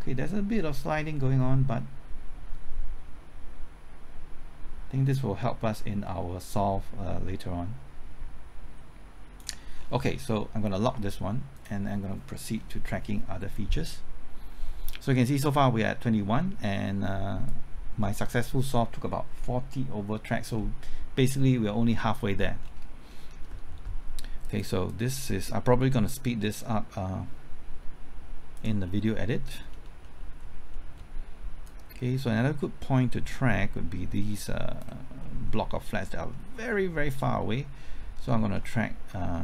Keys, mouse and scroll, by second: 9.7-10.2 scroll down 1, 10.2 scroll up 1, 11.5 click, 12.5-15.0 scroll down 1, 17.4-21.0 drag, 22.6-23.1 scroll down 1, 23.1 middle click, 24.4-28.8 drag, 28.8-29.5 scroll up 1, 29.5-30.0 scroll down 1, 30.0 middle click, 30.4-30.7 scroll up 1, 30.7 middle click, 31.6-35.0 drag, 35.2-35.7 scroll up 1, 35.7 middle click, 36.1-36.7 scroll up 1, 36.7-38.0 middle drag.